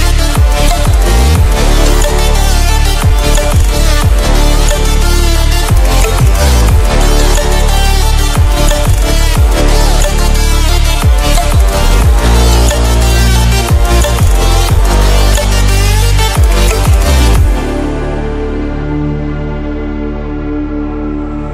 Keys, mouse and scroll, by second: 0.6-9.8 drag, 10.4-12.8 scroll up 1, 12.8-20.5 drag, 21.0 scroll down 1.